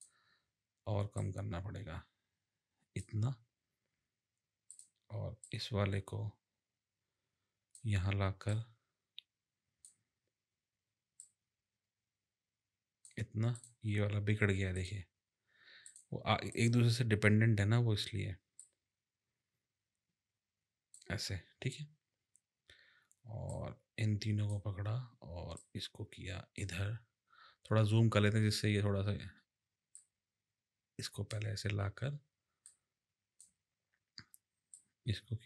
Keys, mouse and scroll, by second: 1.2 click, 4.7 click, 5.4 click, 8.4 click, 11.2 click, 13.5 click, 15.8 click, 16.5 click, 18.6 click, 23.5 click, 25.6 click, 29.9 click, 32.7 click, 34.7 click.